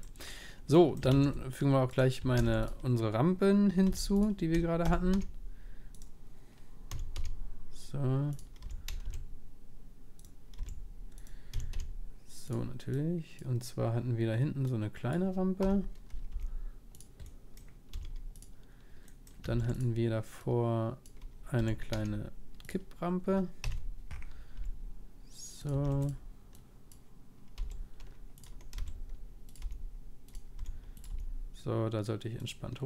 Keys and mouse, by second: 0.3-2.4 middle drag, 1.1 shift+a, 2.1-3.9 right drag, 2.4 shift+d, 3.9 g, 4.8 r, 10.5 r, 11.5 s, 12.9-16.9 drag, 15.6 KP_1, 16.3 g, 17.9-21.0 middle drag, 17.9 s, 19.5 shift+d, 20.4-22.6 drag, 21.6 r, 23.6 KP_1, 24.2-25.8 middle drag, 24.6 g, 25.8 shift+d, 27.1-28.7 drag, 27.6 g, 28.7 r, 29.6 g, 30.6 r, 31.1 g.